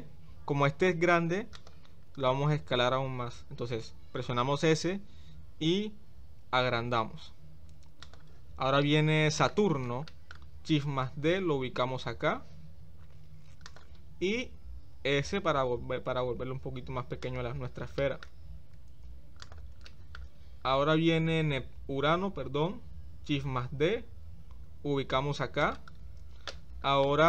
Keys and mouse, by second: 4.7 s, 8.8-9.5 shift+middle drag, 10.1 shift+middle click, 11.2 shift+d, 14.7 s, 18.0 shift+middle click, 18.7 g, 19.9 shift+middle drag, 22.6 shift+d, 27.1-27.2 shift+middle drag.